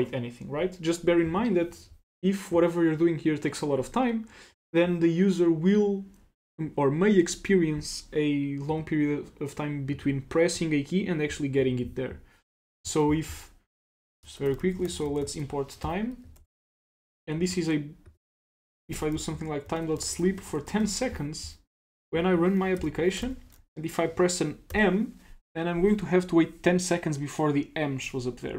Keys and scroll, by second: 16.4 super+s, 20.8 super+s, 22.8 ctrl+c.